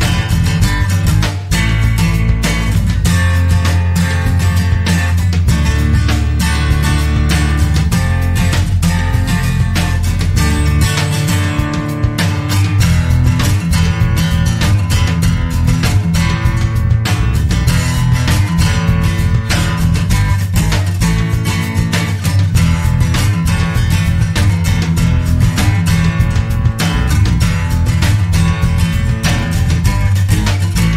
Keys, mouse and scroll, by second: 2.9 0, 4.1 click, 5.8 click, 12.0 click, 12.5 click, 13.1-13.4 scroll down 1, 13.7 click, 15.0-15.3 scroll down 1, 15.6 click, 18.1 0, 18.9 scroll down 2, 19.3 scroll up 2, 19.7 click, 21.9 0, 22.7-23.1 scroll down 2, 23.3 scroll up 2, 24.7 click, 26.2 ctrl+click, 26.8 ctrl+click, 27.3 ctrl+click, 28.6 ctrl+click, 30.8 click.